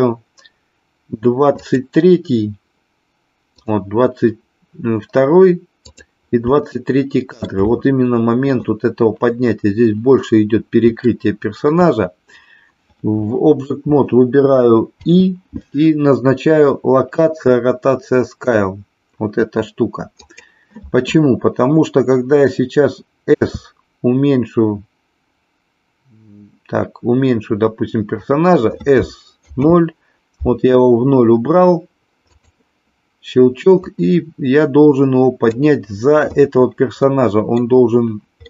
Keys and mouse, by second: 1.6 click, 3.6 click, 5.9 click, 6.6 shift+middle click, 11.0 shift+middle click, 23.4 s, 29.0 s, 29.5 KP_0, 33.9-35.5 drag, 37.0 middle click.